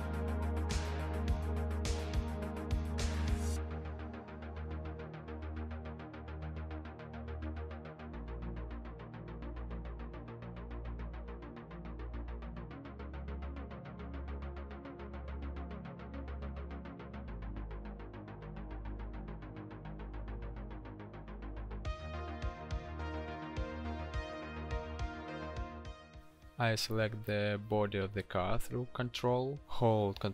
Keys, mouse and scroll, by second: 5.1 ctrl+click, 11.3 l, 13.6 ctrl+t.